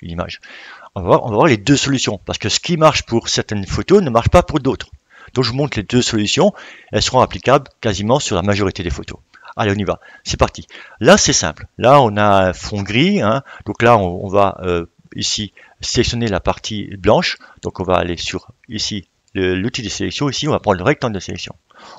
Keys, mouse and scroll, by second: 19.3-21.9 drag.